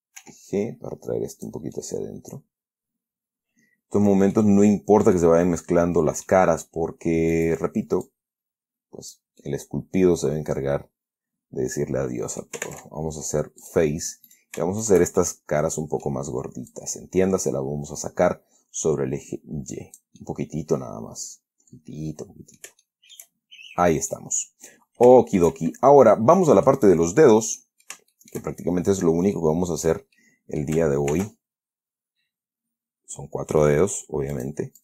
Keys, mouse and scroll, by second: 0.5 g, 1.7 click, 2.1-4.9 middle drag, 4.9-5.5 scroll up 1, 5.5 middle click, 5.9-6.8 scroll up 1, 7.6 right click, 8.4-9.6 drag, 9.7-12.9 middle drag, 13.0 ctrl+Tab, 13.9 click, 14.6 right click, 15.1 shift+right click, 15.5-16.6 shift+middle drag, 17.0-20.5 drag, 20.5-23.1 middle drag, 23.8-24.1 shift+scroll down 1, 24.4 middle click, 25.5 shift+middle click, 25.9 shift+scroll up 1, 26.7 middle click, 27.9 middle click, 29.7 click, 30.5 click, 30.5 scroll down 2, 31.4 ctrl+r, 32.1 scroll up 2, 32.7 scroll up 2, 34.7 click.